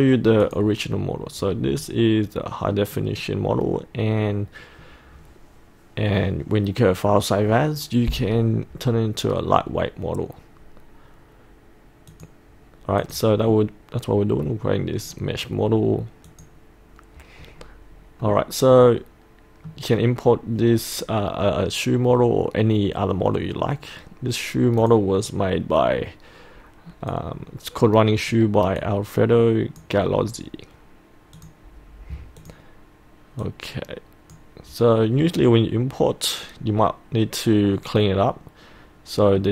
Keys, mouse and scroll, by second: 1.6 scroll up 1, 1.8 middle click, 3.1 scroll down 1, 3.8 scroll up 1, 4.3 scroll down 1, 12.2 click, 13.6-14.8 middle drag, 16.3 click, 17.6 scroll up 1, 18.0 scroll down 1, 18.3-19.8 middle drag, 20.0 scroll up 1, 24.9-35.2 drag, 37.8-39.5 middle drag.